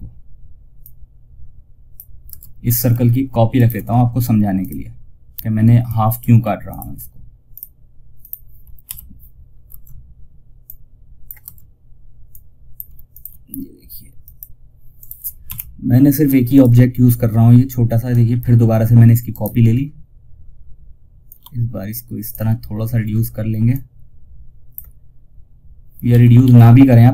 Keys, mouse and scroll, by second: 0.1-1.6 drag, 1.6 space, 2.0 click, 2.8 ctrl+right click, 3.9 click, 9.0 space, 9.9 click, 10.7 space, 11.6-18.6 drag, 18.6 right click, 20.7-23.0 drag, 23.0-25.4 drag, 25.4 ctrl+z.